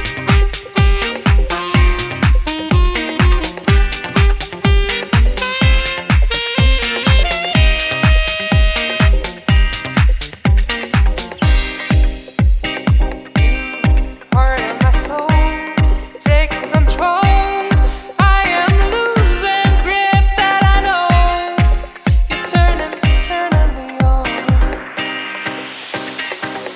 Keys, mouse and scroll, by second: 0.4 shift+a, 3.4 scroll up 3, 3.7 middle click, 4.3 shift+a, 7.8 click, 8.4 scroll up 1, 8.7 shift+a, 12.5 middle click, 13.1-13.5 scroll down 1, 13.6 click, 14.7 click, 15.8 middle click, 16.2 scroll down 2, 16.4 middle click, 17.0 click, 17.4-18.0 scroll up 4, 18.0 click, 18.8 click, 19.8 click, 20.2 click, 20.9 click, 23.2-23.7 scroll up 2, 23.6 middle click, 24.8 click.